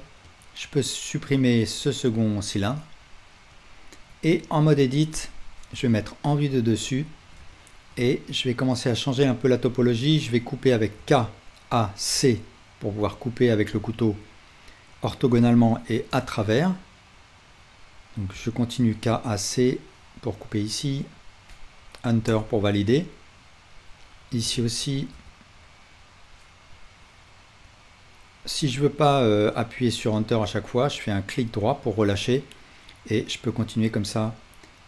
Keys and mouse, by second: 0.3-3.5 right drag, 1.5 x, 3.6-6.8 right drag, 4.1 Tab, 6.8-18.3 shift+middle drag, 11.0 k, 18.3-34.8 drag, 18.3-34.8 right drag, 18.3 k, 24.4 k.